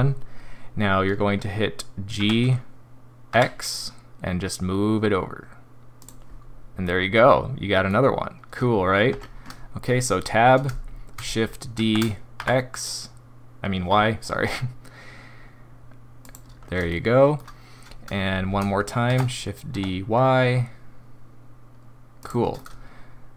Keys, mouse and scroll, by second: 2.1 g, 6.8 middle click, 9.1 Tab, 11.7 shift+d, 16.9 shift+middle click, 19.1 shift+d, 22.5 middle click.